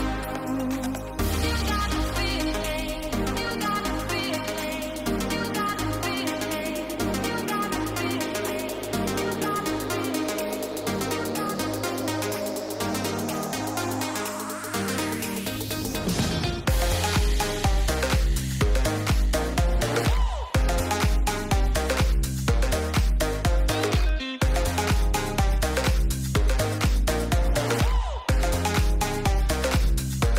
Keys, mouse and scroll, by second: 3.2 shift+middle click, 4.1 ctrl+s, 4.7 middle drag, 5.0 shift+middle click, 9.3 click, 10.8-11.6 middle drag, 12.5 shift+middle click, 13.0 middle drag, 13.3 shift+middle click, 14.0 shift+middle drag, 14.8 middle click, 15.3 shift+middle click, 15.9 middle click, 16.2 shift+middle drag, 16.8 shift+middle click, 18.7-20.4 drag, 22.4 click, 24.3 middle click, 24.5 shift+middle drag, 25.4-26.4 middle drag, 26.5 shift+middle drag, 27.1 shift+middle click, 28.2 click, 29.3 click.